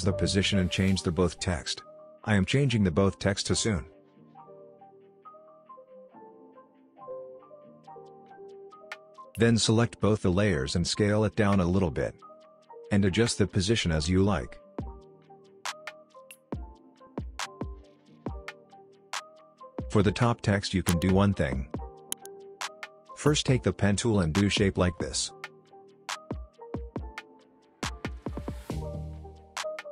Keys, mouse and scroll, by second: 2.6-6.1 typing, 4.5 click, 7.1 click, 8.1 ctrl+click, 9.0-9.6 click, 10.0 s, 10.9-12.8 drag, 21.6 space, 21.7-22.3 click, 22.1 space, 23.1 click, 27.8 ctrl+z, 28.8 shift+click, 29.6 click.